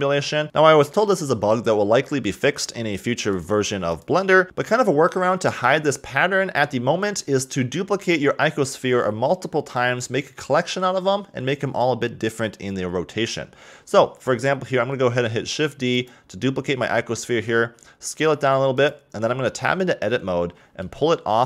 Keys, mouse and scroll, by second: 0.2 scroll down 4, 0.4-3.9 middle drag, 4.1 click, 15.0 shift+d, 17.7 s, 19.7 Tab, 21.0 g.